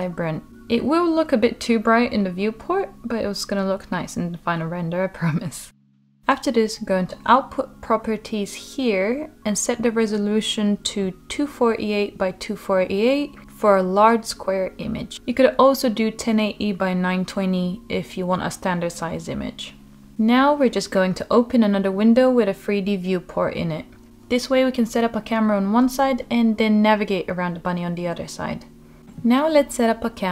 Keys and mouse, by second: 12.7-18.3 drag, 18.3-19.6 middle drag, 20.8-26.7 drag, 26.7-30.3 middle drag.